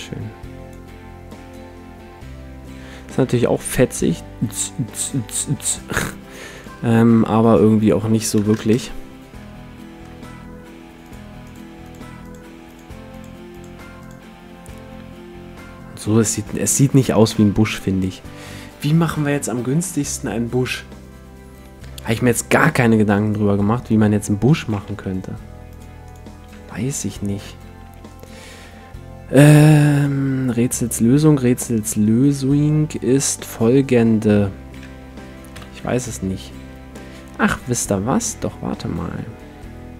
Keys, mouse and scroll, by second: 1.3-3.1 drag, 6.6-9.6 drag, 9.4-11.4 middle drag, 11.0-15.7 drag, 14.6-18.8 middle drag, 17.3 x, 23.2-25.6 right drag, 24.8 t, 25.7-27.8 drag, 26.5 Tab, 26.8-30.4 middle drag, 27.8 t, 34.8 Tab, 35.5 KP_1, 35.8 shift+a.